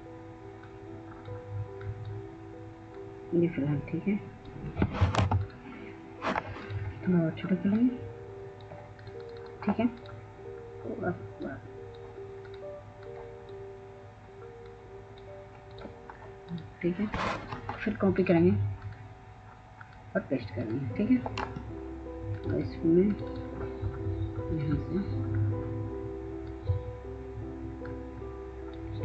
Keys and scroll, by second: 4.7 ctrl+space.